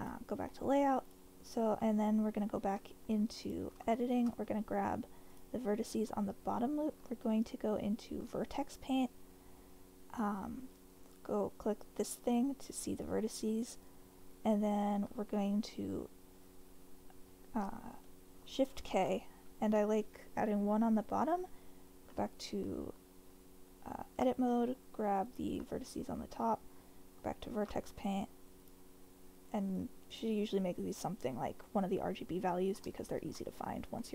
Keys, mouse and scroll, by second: 0.0 click, 0.5-0.8 middle drag, 1.0 click, 1.7 Tab, 2.8 1, 3.9 shift+middle click, 7.0 ctrl+Tab, 12.0 click, 18.0 shift+k, 22.2 ctrl+Tab, 25.2 alt+click, 26.4 ctrl+Tab, 28.6 click, 32.5 click, 33.0 shift+middle click, 34.0 click.